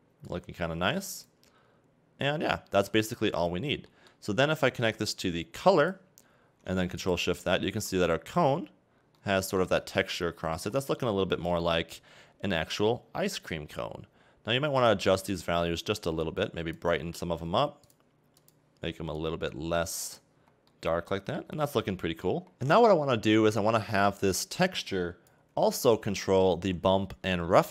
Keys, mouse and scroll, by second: 0.3 click, 2.5-2.9 scroll down 4, 2.9 middle click, 5.9 click, 7.1 ctrl+shift+click, 8.8-9.2 scroll up 2, 9.2 middle click, 9.9 scroll down 4, 10.1 middle click, 10.6-11.0 scroll up 3, 11.0 middle click, 11.4-12.0 scroll up 2, 14.9 click, 16.2 click, 17.9 click, 19.2 click, 20.5 scroll down 3, 20.7 middle click, 21.5 scroll up 4, 21.9 middle click, 22.5-24.4 scroll down 1, 24.4 click, 26.7-27.2 scroll up 2, 27.4 middle click.